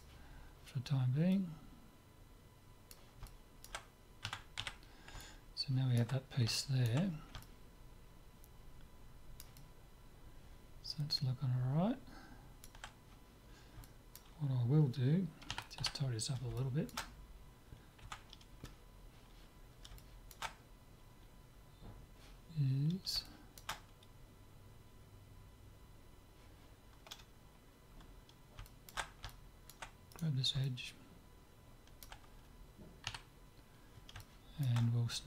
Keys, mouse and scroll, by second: 3.3-9.3 middle drag, 4.3 Tab, 4.7 z, 9.6-11.2 middle drag, 11.4 middle click, 13.8-15.6 middle drag, 15.6 KP_3, 15.8 z, 16.6-19.1 middle drag, 18.1 Tab, 20.0-22.5 middle drag, 23.3-25.3 middle drag, 28.6-30.1 middle drag, 30.1 click, 30.5-32.5 middle drag, 33.1 KP_3, 34.2-35.2 middle drag.